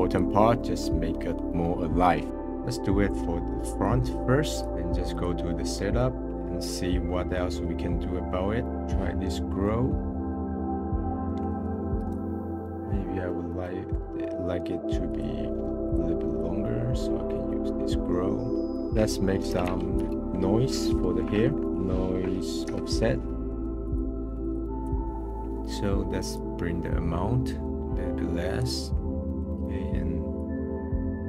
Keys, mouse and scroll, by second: 0.6-1.1 middle drag, 2.3-3.8 middle drag, 3.8-5.9 drag, 5.9-6.3 scroll down 18, 6.3-6.9 scroll up 21, 7.0 middle click, 8.0 scroll down 4, 8.2 middle click, 9.1-9.5 scroll up 3, 9.5-10.1 middle drag, 10.1-12.4 drag, 12.4-15.0 middle drag, 15.0-18.7 drag, 18.7 BackSpace, 21.6 Down, 24.5 click, 25.0-26.3 middle drag, 26.3-28.4 drag, 28.8-30.3 middle drag, 30.3-31.2 drag.